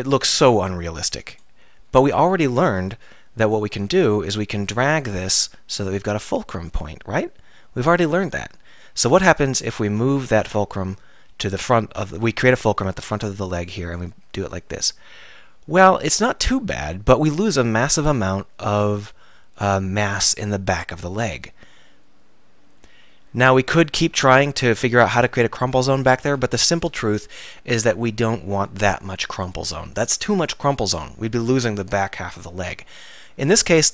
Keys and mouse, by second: 2.6 alt+r, 3.8 Tab, 7.7 middle click, 9.1 Tab, 11.9 r, 33.1-33.9 drag, 33.5 Tab.